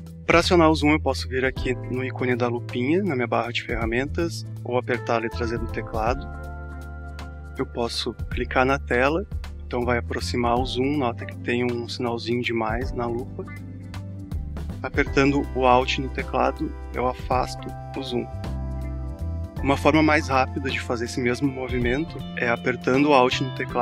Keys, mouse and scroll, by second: 6.7 click, 9.3 click, 14.5 click, 15.1 alt+click.